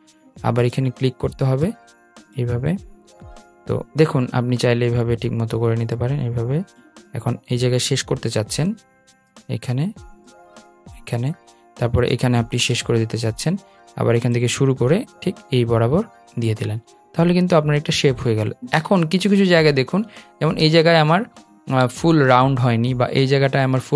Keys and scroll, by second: 11.9 Return.